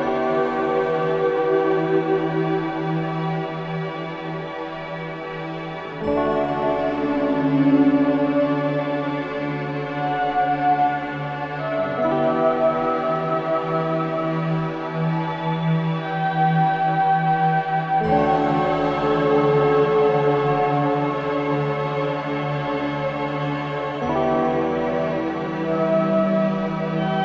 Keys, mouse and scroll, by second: 0.7 click, 2.3 click, 2.9 middle click, 3.6-4.0 scroll down 2, 4.0-5.3 middle drag, 5.3-6.2 scroll down 5, 6.2-7.5 middle drag, 7.5 scroll up 2, 8.1-9.6 middle drag, 9.6 click, 10.8 click, 14.2-14.9 scroll up 2, 14.9-15.5 middle drag, 15.5-15.8 scroll down 5, 16.1 click, 16.5 scroll down 2, 16.8-17.2 middle drag, 17.2 scroll down 2, 17.7 scroll down 2, 18.0 middle click, 18.3-18.7 scroll down 2, 18.7-20.0 middle drag, 20.0-20.3 scroll up 1, 20.3-21.9 middle drag, 22.1-24.5 middle drag, 24.5-25.0 scroll up 1, 25.0-26.1 middle drag, 26.1 click, 26.5 click, 27.1-27.2 middle drag.